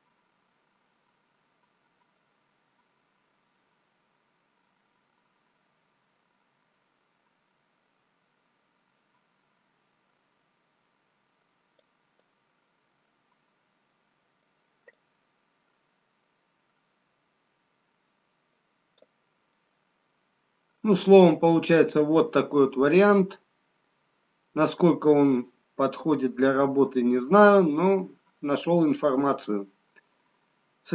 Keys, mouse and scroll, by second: 13.3 right click, 15.9 click, 20.4 middle click, 20.4-21.2 scroll down 1.